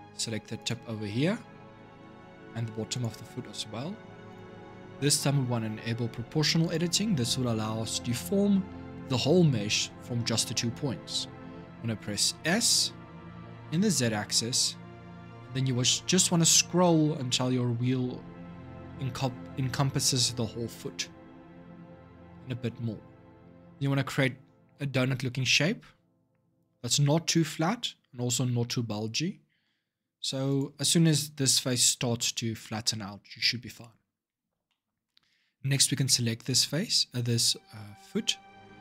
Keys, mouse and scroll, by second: 0.3 click, 0.8-2.7 middle drag, 2.7 shift+click, 4.1 click, 4.5 scroll down 1, 4.8-6.4 shift+middle drag, 6.4 click, 12.1 s, 34.4-36.3 shift+middle drag, 36.3 a, 38.7 g.